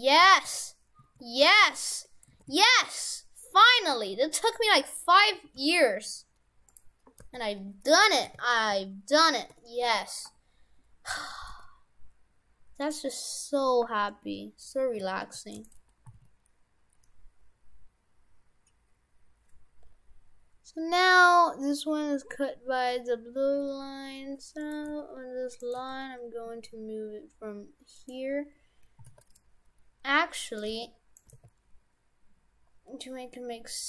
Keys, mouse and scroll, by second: 0.3 shift+f, 1.9 Tab, 2.4 shift+f, 4.2 Tab, 4.4 right click, 4.9-5.4 scroll down 3, 5.4 a, 5.6 g, 7.3 r, 11.5 g, 13.5-14.1 scroll up 2, 14.1 middle click, 15.0 s, 16.1 s, 24.9 g, 25.8 g, 28.8 g, 29.0 s, 30.7 g, 31.3 g.